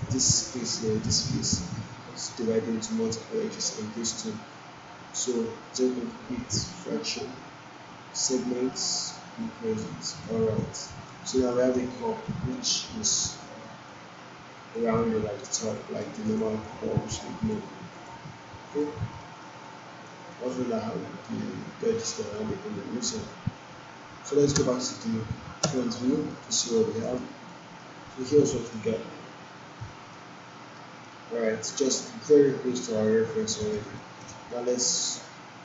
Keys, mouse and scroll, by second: 8.7-10.2 drag, 11.0 alt+right click, 11.9-13.2 alt+drag, 13.8-14.8 alt+click, 14.9-16.2 right click, 16.2 click, 16.6-17.5 alt+drag, 18.7 click, 19.2 alt+middle click, 19.6-20.3 alt+click, 20.3 alt+middle click, 24.5 space, 26.3-27.2 alt+middle click, 26.9 click, 27.5 alt+middle click, 29.3 1, 30.1-31.0 alt+middle click, 31.1-31.7 alt+middle drag, 34.2 alt+right click, 34.7 alt+middle click.